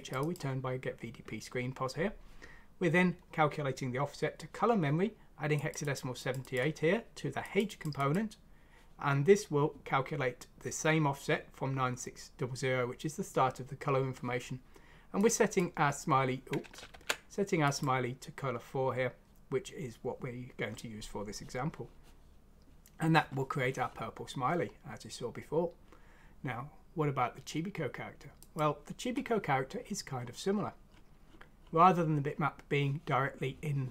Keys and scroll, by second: 16.9 ctrl+z.